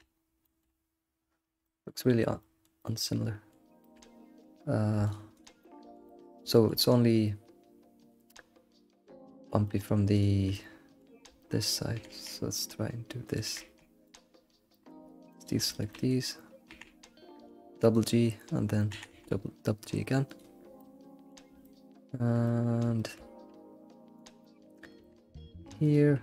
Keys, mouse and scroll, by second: 0.2-1.2 scroll up 4, 0.4 shift+middle click, 1.2-1.6 scroll down 2, 2.1 shift+middle click, 2.9-4.0 middle drag, 4.0-4.6 scroll up 6, 5.1 shift+click, 5.6-10.2 shift+middle drag, 5.6 shift+click, 10.2 shift+click, 10.5-11.9 middle drag, 10.8 shift+click, 11.9 e, 12.1 g, 13.5 g, 14.5 scroll down 3, 14.7 middle click, 15.7 shift+middle click, 15.7 ctrl+click, 16.2 scroll up 1, 16.7 g, 18.9 g, 20.6 scroll down 1, 20.8-24.2 middle drag, 23.2-24.0 scroll up 2, 24.4-25.9 middle drag, 24.6 click.